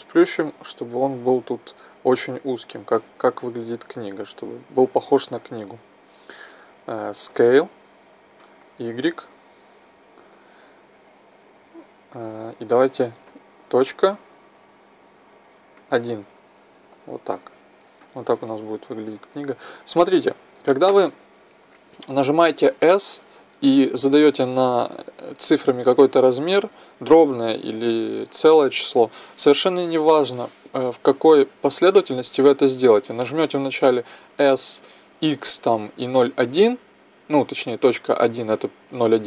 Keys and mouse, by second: 3.0-7.6 middle drag, 7.6 s, 18.1-39.2 middle drag.